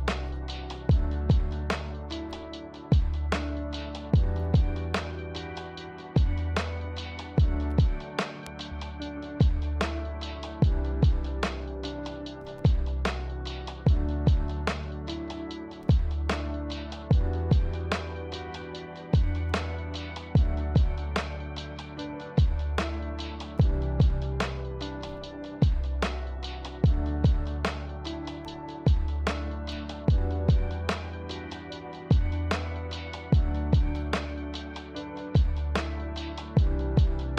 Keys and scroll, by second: 0.1 ctrl+v, 4.8 ctrl+v, 7.0 ctrl+v, 10.2 ctrl+v, 11.9 ctrl+v, 13.8 ctrl+v, 15.8 ctrl+v.